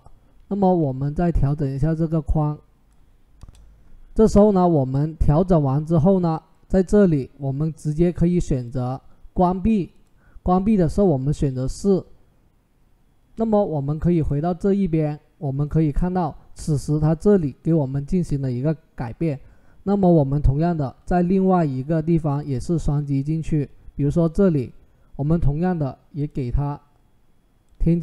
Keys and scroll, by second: 0.4 ctrl+t, 3.2 Return.